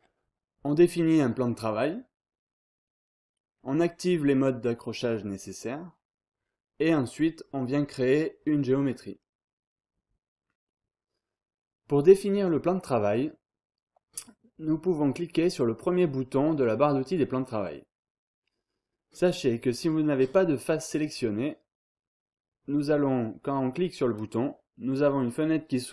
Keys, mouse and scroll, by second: 24.0 click.